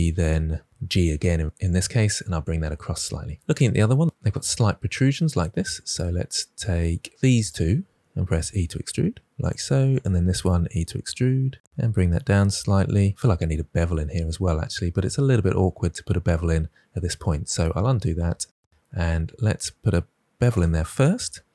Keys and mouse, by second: 0.7 g, 7.1 3, 8.1 e, 10.0 click, 10.3 e, 11.3 click, 11.6 s, 17.2 ctrl+z, 17.5 ctrl+z, 17.9 ctrl+z, 18.2 ctrl+z, 19.9 2, 20.1 click, 21.2 ctrl+b.